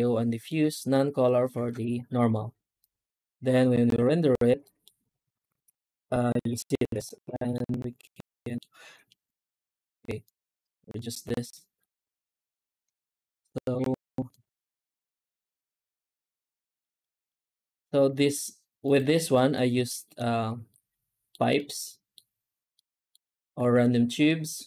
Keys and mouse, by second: 2.0 z, 4.5 middle drag, 7.2 middle click, 8.2 middle click, 9.1-9.5 drag, 10.1 drag, 11.4 middle drag, 12.0 alt+shift+z, 15.8 z, 16.7 middle drag, 17.1-17.7 middle drag, 17.9 z, 19.2 middle drag, 19.8 middle drag, 20.6 middle click, 21.4 middle click, 22.6-23.0 middle drag, 23.4 shift+q.